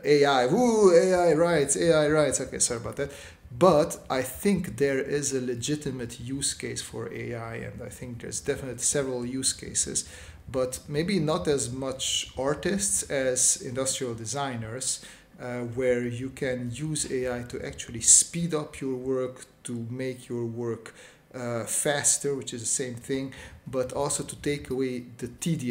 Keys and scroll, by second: 3.3 space, 13.1 space, 14.9-16.9 typing, 18.5 space, 20.5 space, 21.4 space, 23.4 s, 25.2 space.